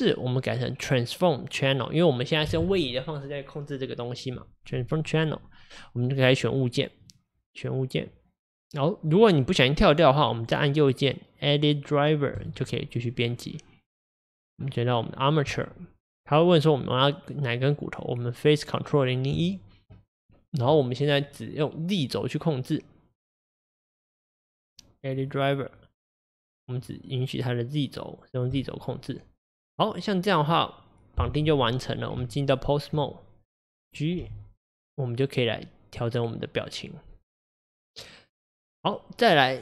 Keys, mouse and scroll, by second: 30.0 click, 30.5 click, 33.0 Tab, 33.5 click, 34.2 g.